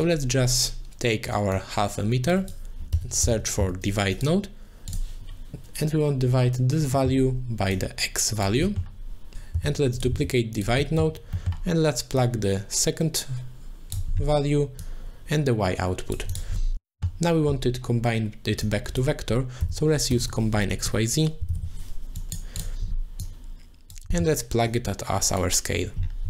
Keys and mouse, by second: 1.5-4.2 drag, 7.1 middle click, 7.7 click, 8.8 middle click, 9.3 ctrl+shift+d, 9.3 click, 9.5 x, 9.9 click, 10.1 shift+d, 10.6 click, 10.9 middle click, 11.5 middle click, 12.2-13.9 drag, 14.8 click, 15.8 middle click, 16.7 click, 17.0 middle click, 18.6 click, 18.8-22.3 drag, 20.2 BackSpace, 23.2 click, 24.2 middle click, 24.7 click.